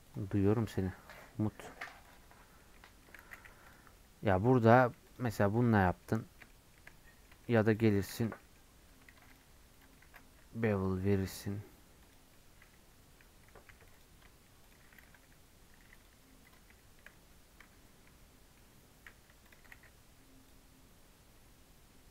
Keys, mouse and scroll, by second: 6.3-22.1 middle drag.